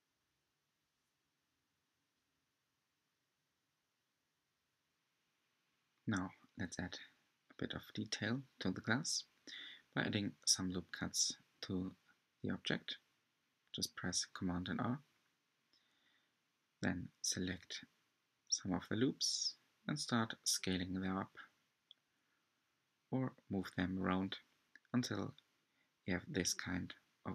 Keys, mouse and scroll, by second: 0.4 scroll up 3, 0.6 shift+middle click, 1.4 e, 2.3 s, 4.2 e, 5.0 s, 6.9-8.0 scroll down 9, 7.5 Tab, 8.0-8.3 shift+middle drag, 8.3 Tab, 8.6-9.0 scroll up 8, 9.6 r, 12.7 alt+z, 13.2 middle click, 14.8 r, 17.3 middle click, 18.0 r, 18.8 g, 21.9 alt+click, 23.3 alt+shift+click, 24.5 s, 26.7 alt+shift+click.